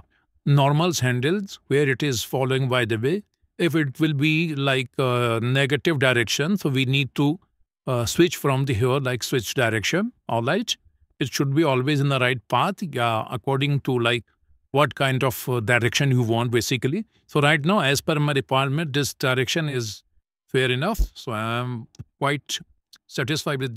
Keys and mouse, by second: 3.1 shift+middle click, 3.7 middle click, 7.6-8.7 drag, 9.7-10.9 drag, 19.0 click, 19.5-23.0 drag.